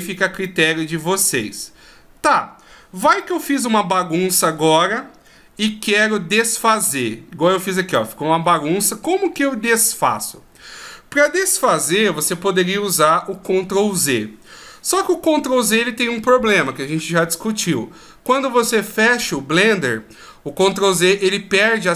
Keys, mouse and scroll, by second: 0.4 middle click, 0.4 scroll down 1, 3.2 middle click, 5.8-6.3 ctrl+scroll down 3, 6.2-7.2 ctrl+scroll up 5, 7.5-8.2 shift+scroll up 2, 7.9 middle click.